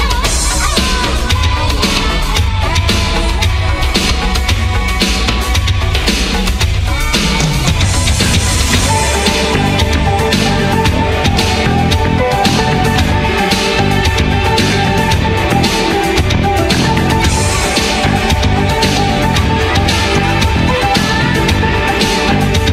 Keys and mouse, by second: 1.1 a, 1.5 click, 1.6 a, 1.8 a, 1.9 s, 2.9 ctrl+t, 4.4 ctrl+s, 4.8 middle click, 5.0 Tab, 5.4 z, 6.2 middle click, 7.0 z, 7.7 middle click, 9.1 middle click, 9.1 Tab, 9.5 u, 10.0 middle click, 10.5 Tab, 10.6 q, 10.9 click, 11.1-12.3 middle drag, 12.3 q, 12.7-13.9 middle drag, 13.9 z, 14.5 middle click, 14.5 q, 15.4 ctrl+a, 15.8-17.7 middle drag, 17.7 ctrl+i, 18.0 a, 18.6 middle click, 19.1 ctrl+z, 20.2 middle click, 20.6 Tab, 20.7 a, 21.3 i.